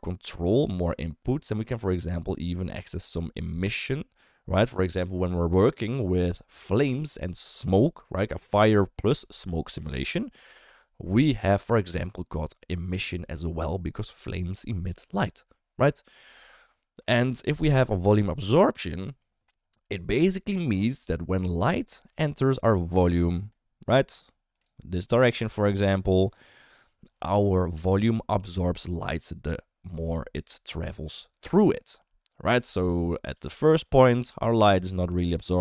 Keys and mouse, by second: 17.1 shift+middle click, 19.0 shift+middle click, 22.1 shift+middle click, 22.9-25.0 d, 23.0-24.7 drag, 25.0-26.3 drag, 26.3 d, 26.4 d, 33.3 d, 33.5-35.6 drag.